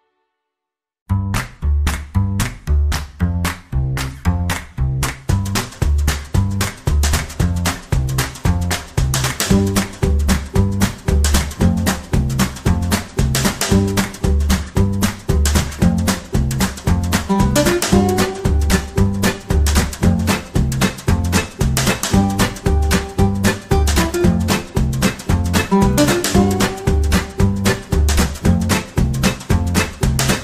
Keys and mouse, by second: 0.4 r, 1.3 g, 2.5 shift+middle click, 3.5 middle click, 4.2 r, 5.3-9.3 typing, 10.7 r, 11.7 g, 13.1 shift+d, 14.2 r, 16.3 g, 16.9 KP_3, 17.6 g, 18.4 middle click, 19.5 g, 20.7 r, 21.6 middle click, 22.9 middle click, 23.6 r, 24.3 r, 25.2 KP_3, 26.4 shift+d, 27.3 middle click, 28.2 r, 29.1 r, 30.3 g.